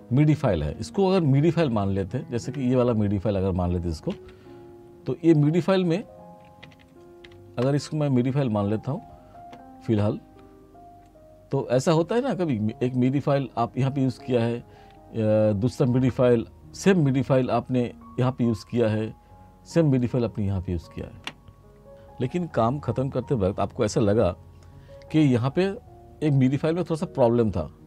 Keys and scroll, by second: 4.1 F6, 6.7 r.